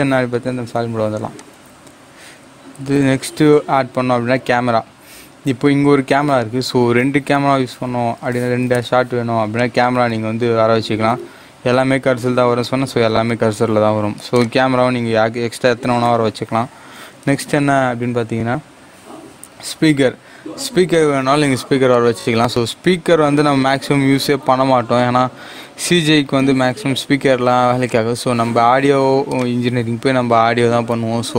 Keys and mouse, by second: 1.3 click, 2.8 shift+a, 7.0 shift+a, 9.5 click, 11.0 g, 12.6-17.3 drag, 17.3 shift+a, 21.9 click, 24.3 g, 27.8-31.3 drag.